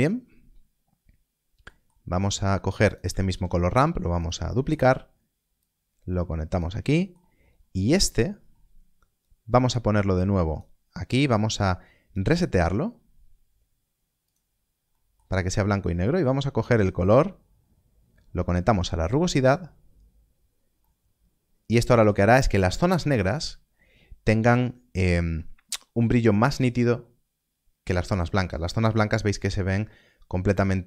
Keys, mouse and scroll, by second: 0.1 scroll down 1, 1.6 middle click, 2.1 scroll down 1, 2.8 click, 4.1 click, 4.4 middle click, 5.5 click, 6.8 middle click, 7.4 scroll up 1, 7.9 middle click, 8.3 scroll up 1, 9.1 click, 11.3 middle click, 12.1 click, 14.2 click, 14.9 middle click, 16.0 click, 20.8 middle click, 25.6 middle click.